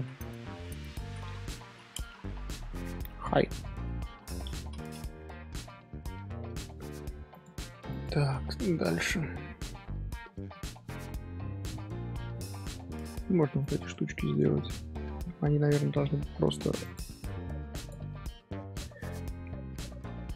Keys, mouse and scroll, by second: 7.3 click, 7.9 click, 9.6 alt+h, 10.2-10.8 middle drag, 10.8-11.6 scroll down 2, 11.6-12.3 middle drag, 12.3 click, 12.6 shift+middle click, 13.6 click, 13.9 shift+middle drag, 14.1-17.2 scroll up 1, 19.8-20.3 middle drag.